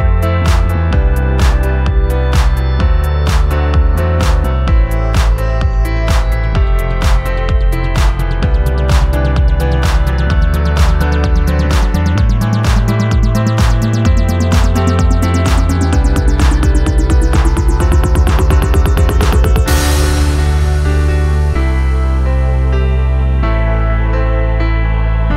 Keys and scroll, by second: 1.7-2.0 typing, 2.1 Return, 7.5 ctrl+d, 15.8 ctrl+d, 16.0 Escape, 16.1 F3, 21.8 ctrl+d, 21.8 Escape.